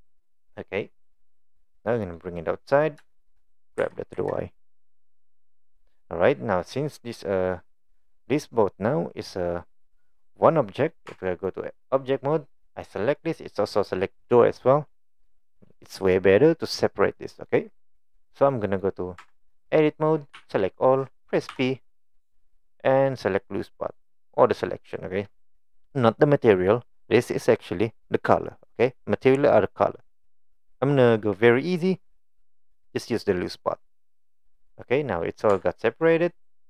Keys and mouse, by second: 1.8 click, 2.4 right click, 2.5 click, 3.1 shift+middle click, 3.8 g, 6.3 middle click, 6.9 middle click, 10.0 middle click, 11.1 Tab, 11.9-12.4 middle drag, 13.2-13.6 middle drag, 14.0-14.3 middle drag, 15.9-16.4 middle drag, 17.2-17.5 middle drag, 18.5-18.8 middle drag, 19.2 Tab, 20.4 a, 21.5 p, 34.5 click, 35.5 Tab, 36.0 middle drag.